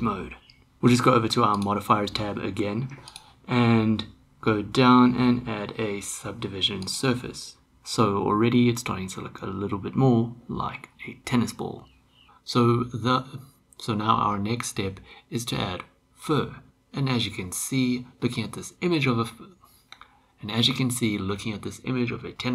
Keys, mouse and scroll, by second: 1.5 click, 3.3-6.9 drag, 8.0-10.8 middle drag.